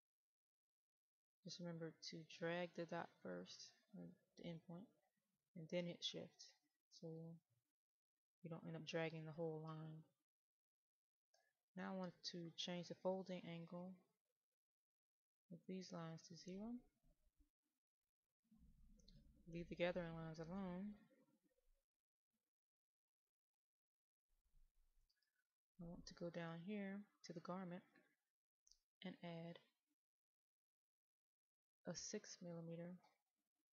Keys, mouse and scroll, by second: 0.5-8.4 drag, 11.8 click, 19.3 click, 22.3 middle click, 25.8-28.5 scroll down 1, 28.5 click, 30.6 right click.